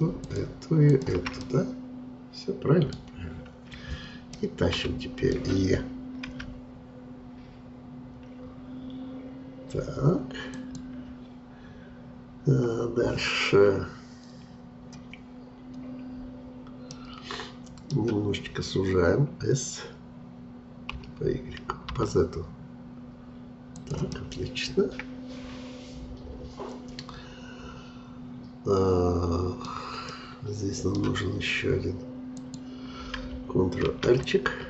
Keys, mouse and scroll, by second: 1.4-3.1 middle drag, 3.1-4.3 scroll down 2, 4.3-6.3 middle drag, 6.3 e, 16.9-19.9 middle drag, 21.0 s, 24.1-27.2 middle drag, 30.1-32.3 middle drag, 32.3-33.8 drag, 33.8 ctrl+r.